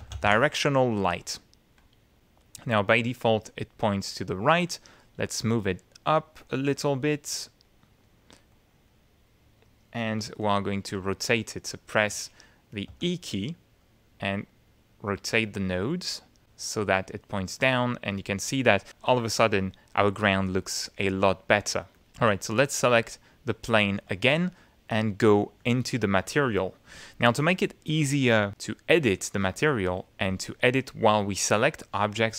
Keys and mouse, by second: 0.0-0.7 typing, 1.8 click, 3.6-5.3 drag, 6.4 click, 7.7 click, 8.5 click, 10.4 middle click, 11.6 middle click, 12.2 shift+middle click, 12.9 shift+e, 13.8-16.6 drag, 21.9 click, 22.2 q, 23.0 click, 23.9 ctrl+z, 25.6 click.